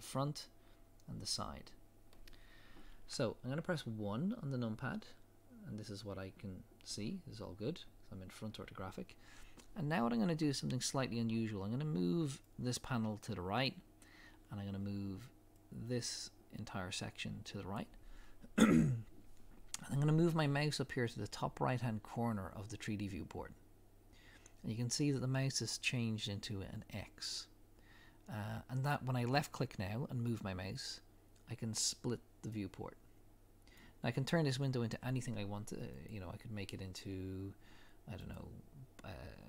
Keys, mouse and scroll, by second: 4.3 KP_1, 5.3 scroll up 1, 8.9-15.7 middle drag, 8.9-10.9 scroll up 1, 10.9-12.5 scroll up 1, 12.5-14.9 scroll up 1, 14.9-15.7 scroll up 1, 15.7-32.3 drag.